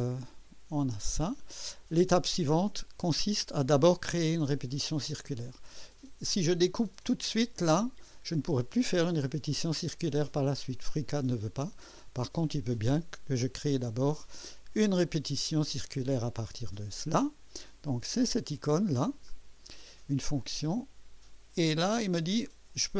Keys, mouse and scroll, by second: 0.2-2.1 drag, 2.2 right click, 4.5 click, 5.4 click, 11.5-12.4 drag, 15.2 click, 19.3 click, 20.5-22.9 drag.